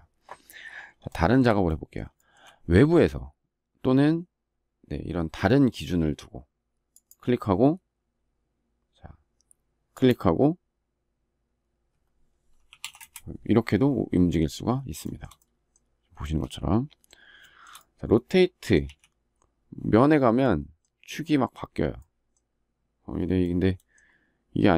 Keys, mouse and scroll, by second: 0.8 shift+middle click, 1.9 shift+middle click, 12.7 Return, 14.7 shift+middle click, 15.9 space, 17.1 shift+middle click, 18.5 q.